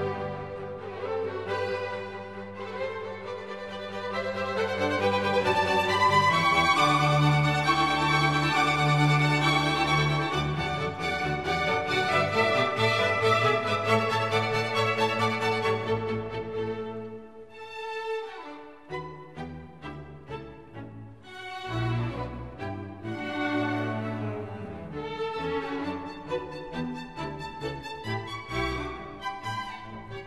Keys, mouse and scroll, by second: 2.6 right click, 4.2-5.1 scroll down 1, 6.1 right click, 8.8 ctrl+=, 9.3 ctrl+=, 10.3 ctrl+=, 11.8-12.4 scroll up 4, 17.1 double click, 17.2 double click, 17.2 double click, 17.4 double click, 18.7 click, 18.8 ctrl+z, 21.3 double click, 24.0 double click, 24.0 double click, 24.3 double click, 28.1 ctrl+z, 29.2 ctrl+z.